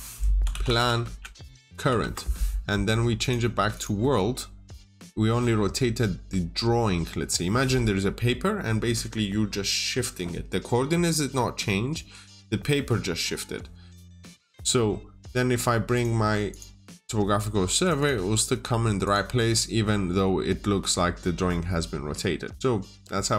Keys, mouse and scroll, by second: 0.3 click, 0.4-1.9 typing, 3.1 click, 17.9 double click, 18.9 click, 19.6-20.1 scroll up 1, 20.1 scroll down 1.